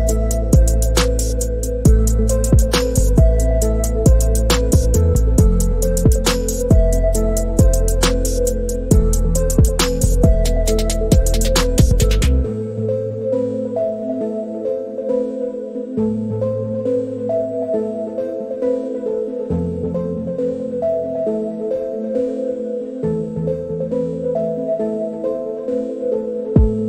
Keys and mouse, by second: 1.7 click, 3.7 click, 4.5 click, 6.4-7.4 drag, 9.3-9.6 shift+middle drag, 11.0 drag, 13.1 click, 14.2 click, 16.0 click, 17.2 click, 20.4 click, 21.5 click, 24.7 click, 25.7-26.1 shift+middle drag, 26.5 click.